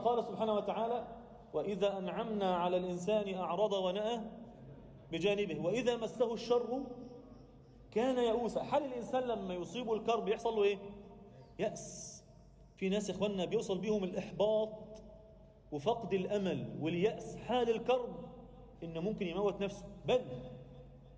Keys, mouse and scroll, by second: 0.5 scroll down 2, 0.6 drag, 3.2 click, 3.9 click, 4.4 click, 4.7-7.0 drag, 7.9-9.5 drag, 9.8 click, 10.2-10.6 middle drag, 10.9 alt+a, 11.4-12.0 alt+middle drag, 12.3 click, 13.5 KP_7, 14.1 z, 14.6 alt+shift+middle click, 16.6 click, 17.8 shift+c, 18.6 z, 18.9-19.3 middle drag, 19.8 click, 20.6 KP_7.